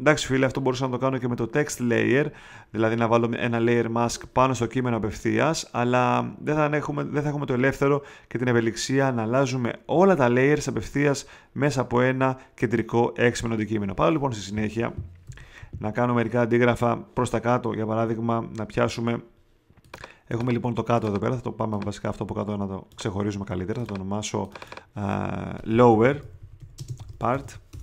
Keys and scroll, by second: 15.2 v, 25.6-27.8 typing.